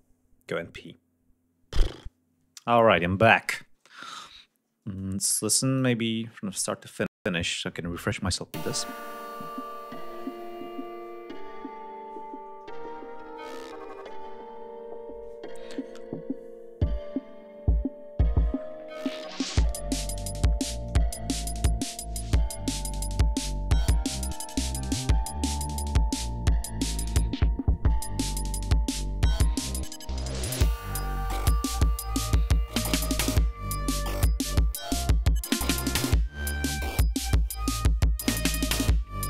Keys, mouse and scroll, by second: 4.9 click, 8.4 space, 9.5-10.6 scroll up 6, 16.2-16.6 scroll down 2, 19.2 ctrl+scroll up 2, 20.3-20.7 scroll down 2, 21.1-21.4 scroll down 2, 22.7 click, 24.9 ctrl+scroll down 2, 25.2 ctrl+scroll up 2, 26.1 click, 27.0 ctrl+scroll down 2, 27.3 ctrl+scroll up 2, 27.9-28.4 ctrl+scroll down 4, 28.5 ctrl+scroll up 2, 29.2 ctrl+scroll up 2, 29.9 ctrl+scroll down 2, 32.1 ctrl+scroll down 2, 33.2 click, 34.4 ctrl+scroll up 2, 35.4 scroll down 2, 36.6 ctrl+scroll down 2, 36.9 ctrl+scroll up 2, 38.0 ctrl+scroll up 2.